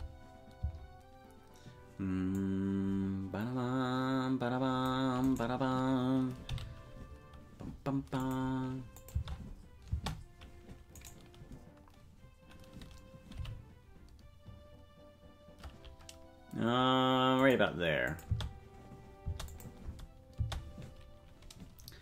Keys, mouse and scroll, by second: 2.3-4.9 drag, 2.3 space, 5.2 right click, 6.4 g, 8.9 click, 9.1 space, 10.1 space, 11.0-13.3 right drag, 13.3 g, 18.0-19.6 drag, 18.2 space, 19.4 space, 19.8 space, 20.8 space.